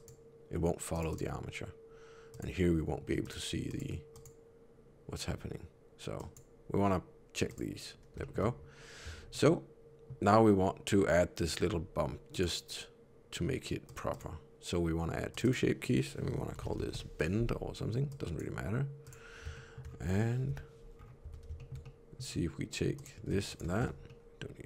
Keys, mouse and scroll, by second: 0.8 click, 1.0 click, 2.2 click, 3.1 click, 3.6 click, 4.0 click, 6.1 click, 7.4 click, 8.1 shift+middle click, 9.0 Tab, 9.2 middle click, 12.2 click, 13.8 click, 14.0 click, 15.2 click, 15.3 click, 18.0 click, 19.0 click, 19.5 shift+middle click, 20.4 KP_3, 20.8 scroll up 2, 21.1 Tab, 21.5 shift+middle click, 21.7 middle click, 22.9 click, 23.4 shift+click, 23.7 alt+z, 24.0 middle click.